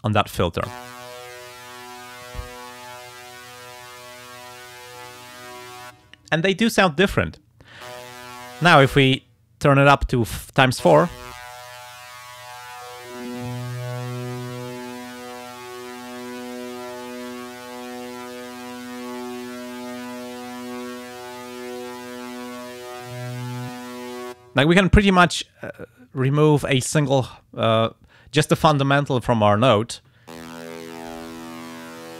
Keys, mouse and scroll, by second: 2.0 click, 3.1 click, 4.4 click, 5.4 click, 8.3 click, 11.3 click, 12.6-17.7 drag, 19.5-21.1 drag, 22.0 click, 22.9-24.2 drag, 31.2 click.